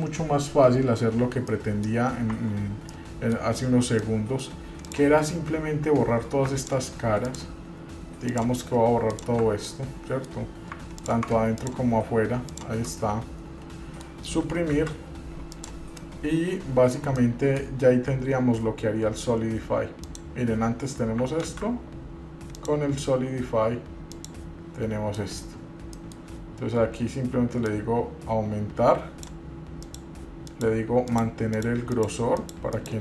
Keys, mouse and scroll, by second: 1.7 middle click, 2.5 Tab, 3.1 middle click, 4.2 middle click, 5.0 click, 6.8 ctrl+click, 7.4 ctrl+click, 8.5 ctrl+click, 9.3 ctrl+click, 9.9 middle click, 11.2 ctrl+click, 11.7 shift+click, 12.7 ctrl+shift+click, 13.1-14.3 middle drag, 14.9 Delete, 16.2 middle click, 17.3 middle click, 20.3 click, 21.6 ctrl+z, 22.7-24.4 drag, 25.3 middle click, 25.8-26.1 scroll up 1, 26.1 middle click, 27.9-29.5 drag, 30.0 click, 30.7 click, 31.3 click, 31.7 click, 32.1 click, 32.6 click, 32.9 click.